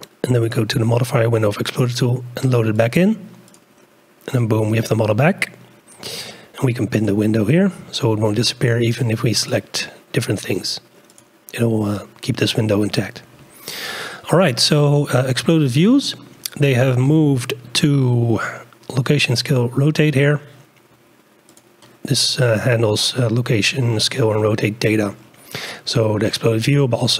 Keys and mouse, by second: 2.7-3.9 drag, 4.8 click, 6.9 click, 9.4 click, 15.2-16.1 drag, 21.5 click.